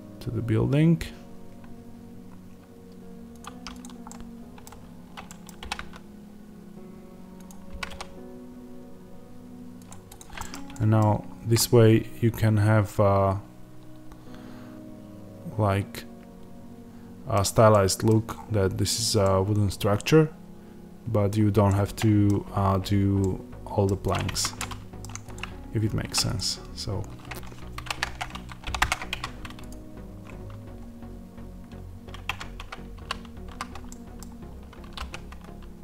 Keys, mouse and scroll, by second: 3.3 click, 4.0-7.3 middle drag, 5.5 r, 7.3 click, 7.6 g, 9.8 click, 10.3-23.9 middle drag, 10.4-11.2 scroll down 2, 17.3-17.6 scroll down 1, 18.2 scroll up 1, 18.7 scroll down 1, 22.5-23.1 scroll up 2, 23.9 click, 24.2 Tab, 24.5-25.9 middle drag, 25.9 3, 26.2-27.7 drag, 27.7 shift+d, 28.1 Return, 28.7 p, 29.0 Tab, 29.6 click, 32.2 Tab, 33.3 a, 33.8-35.8 middle drag, 34.4-34.7 scroll down 1, 34.7 s.